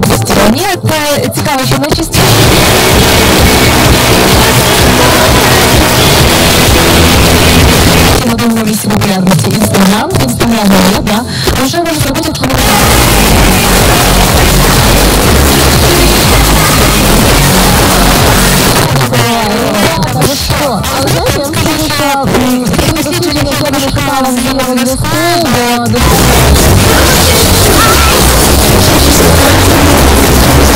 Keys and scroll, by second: 8.1 Page_Down, 18.7 Page_Down.